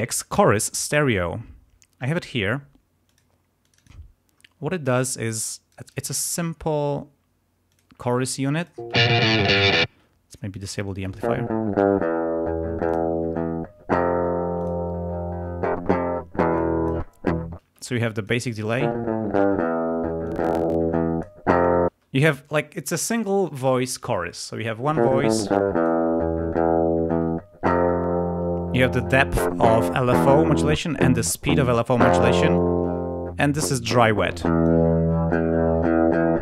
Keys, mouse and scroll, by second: 3.0 click, 3.5 click, 4.8-6.5 drag, 5.9 space, 6.3 right click, 7.6 click, 8.5 click, 8.8 space, 9.8 space, 10.4 click, 11.2 space, 12.8 click, 14.6 click, 16.5 click, 17.5 space, 17.9 click, 18.6 space, 20.2-21.5 drag, 21.9 space, 24.8 space, 25.3 click, 27.6-29.3 drag, 30.5 click, 31.3 ctrl+click, 32.5-33.5 drag, 34.2 click.